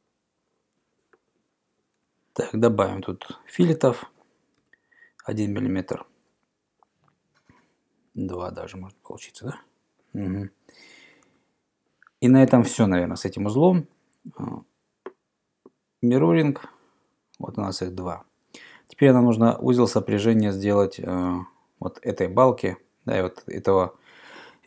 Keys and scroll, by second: 4.6 1, 8.2 BackSpace, 8.2 BackSpace, 11.3 Return.